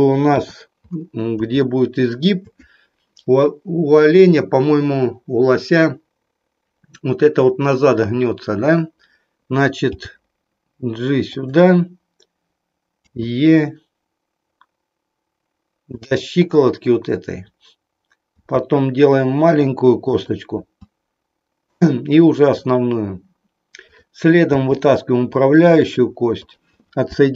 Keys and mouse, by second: 0.3 KP_3, 1.6 shift+middle click, 9.8 g, 13.0 e, 18.5 e, 20.6 e, 22.7 click, 23.8 click, 24.5 e, 26.3 click.